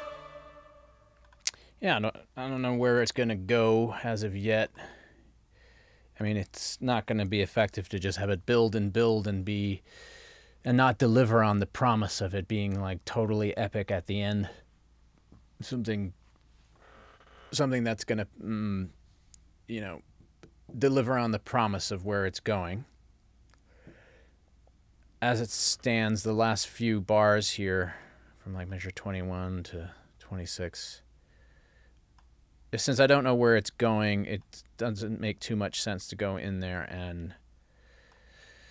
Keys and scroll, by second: 3.0 ctrl+alt+l, 7.3 super+s.